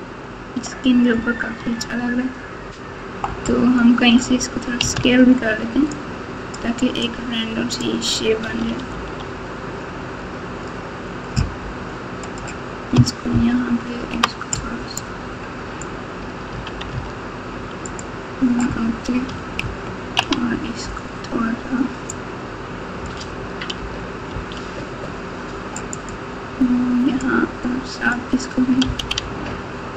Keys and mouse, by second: 0.0-0.6 ctrl+KP_8, 1.7 Tab, 4.9 alt+z, 5.9 click, 7.2 click, 8.4 s, 13.3 ctrl+KP_2, 13.8 ctrl+KP_2, 14.9 click, 15.1-16.4 drag, 16.5 s, 19.6 ctrl+KP_2, 20.1 ctrl+KP_2, 22.1 click, 24.3 s, 27.2-28.8 drag, 28.8 s.